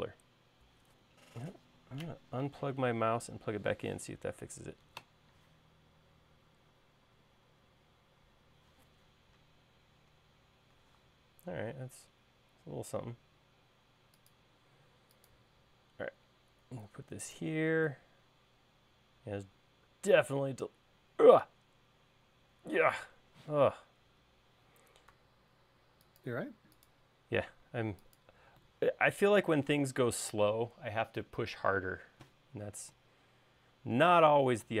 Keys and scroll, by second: 24.4 q, 26.1 Left, 26.6 Right.